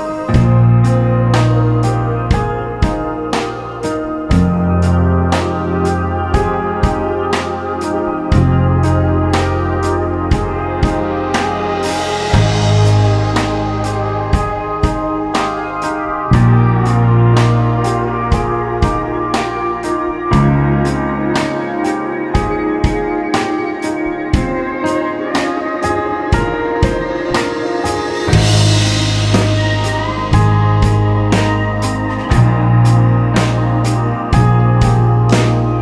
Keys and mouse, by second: 3.0 ctrl+z, 4.3 shift+d, 5.0-6.4 drag, 7.0 shift+s, 10.7 w, 12.3 w, 13.9 ctrl+z, 15.7 ctrl+z, 16.1 w, 18.8-20.4 drag, 21.7-22.7 drag, 22.7-24.3 middle drag, 28.3 click, 33.2-35.8 drag.